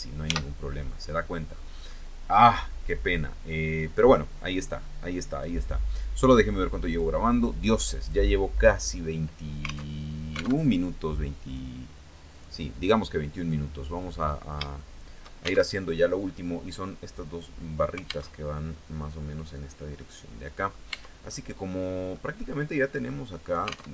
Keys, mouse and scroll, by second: 0.4 right click, 1.4 right click, 3.1-4.3 drag, 4.4 middle click, 6.4 click, 7.5 click, 9.4 alt+Tab, 10.1 alt+Tab, 11.0 click, 11.8 click, 13.0 middle click, 13.7 scroll up 2, 14.3 shift+middle click, 15.2 alt+shift+Tab, 17.8 alt+Tab, 19.5 middle click, 20.4 Tab, 20.8-21.8 middle drag, 21.9-22.2 scroll up 2, 22.6 middle click, 23.4 alt+Tab.